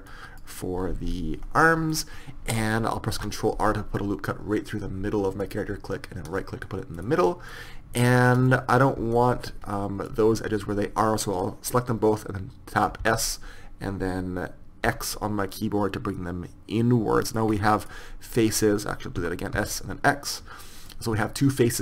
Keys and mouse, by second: 0.1-1.3 drag, 1.3-3.2 middle drag, 3.2 ctrl+r, 8.8-12.3 middle drag, 13.1 s, 17.6-19.5 middle drag, 19.2 s.